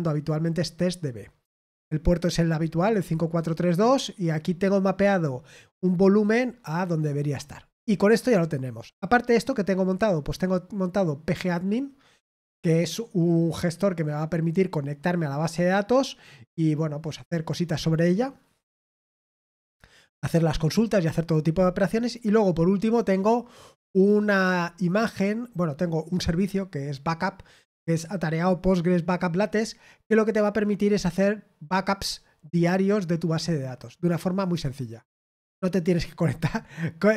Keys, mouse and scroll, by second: 1.4-1.8 scroll down 2, 2.7 click, 2.9 click, 4.6-5.9 drag, 6.0 click, 6.3-7.3 drag, 7.4-7.8 scroll down 1, 10.8-12.6 drag, 21.8-22.3 scroll down 1.